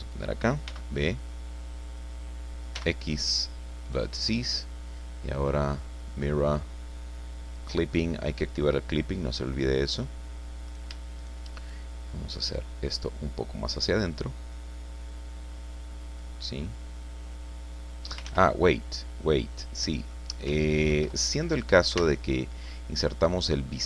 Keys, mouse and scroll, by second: 0.6 b, 1.2 click, 2.7 x, 3.7 click, 4.8 click, 6.1 click, 7.4 click, 9.4-9.7 scroll up 2, 9.7 scroll down 2, 10.7 shift+right click, 11.2 shift+right click, 13.7-16.4 drag, 16.4-18.4 middle drag, 18.2 ctrl+z, 19.3 middle click, 20.9 ctrl+r, 21.5 ctrl+click, 21.9 Escape, 22.3-23.8 drag.